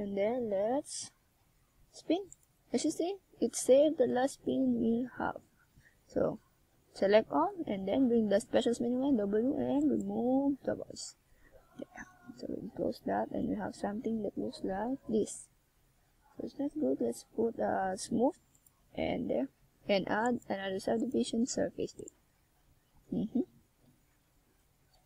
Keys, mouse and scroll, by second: 0.1 click, 1.7 a, 2.4 z, 3.0 c, 7.1 z, 10.2 g, 11.0 click, 12.9 middle click, 14.9 KP_1, 17.9 e, 18.6 click, 19.1 g, 20.0 click, 20.8 r, 21.9 click, 22.3 e, 22.8 click, 23.1 g, 23.8 click, 24.0 r, 24.9 click.